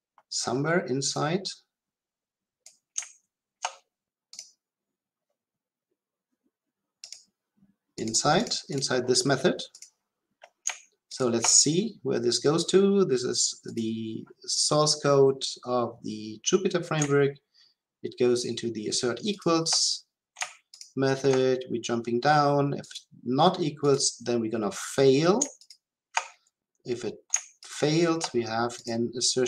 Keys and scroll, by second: 11.1 ctrl+b, 19.4 ctrl+b, 25.7 ctrl+b.